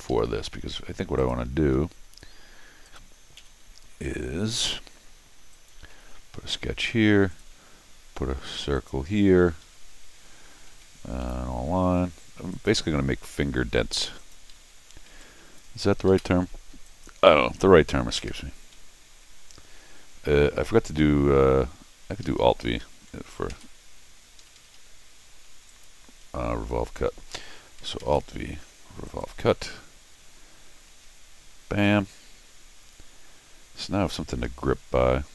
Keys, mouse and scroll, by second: 0.1 Escape, 0.2 middle click, 1.2 click, 2.8 click, 3.4 n, 5.5 click, 5.9 c, 7.3 click, 8.7 click, 9.6 Escape, 11.2 l, 12.5 click, 14.2 click, 14.5 Escape, 15.1 t, 15.2 click, 16.1 Escape, 16.8 click, 18.2 v, 20.7 click, 22.2 Escape, 22.4 Escape, 22.8 Escape, 23.5 alt+v, 24.4 Escape, 24.5 Escape, 24.7 Escape, 25.7 click, 29.1 click, 31.8-34.4 middle drag.